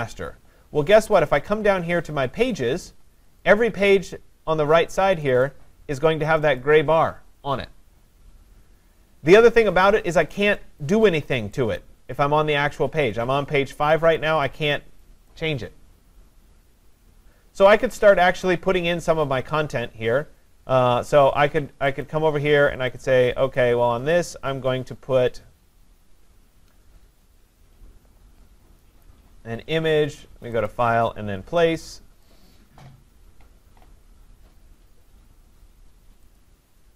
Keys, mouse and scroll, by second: 0.0 click, 0.2 click, 3.4 click, 5.3 click, 5.5 click, 10.3 click, 10.8 click, 14.2 click, 14.8 click, 18.3-18.7 scroll, 18.9-19.3 scroll up 4, 19.3 middle click, 19.5 middle click, 19.8 middle click, 22.1 click, 23.6-27.0 click, 29.0 click, 30.7 click, 32.3 click, 35.1-35.5 scroll down 2, 36.4 click, 36.4-36.9 scroll down 3.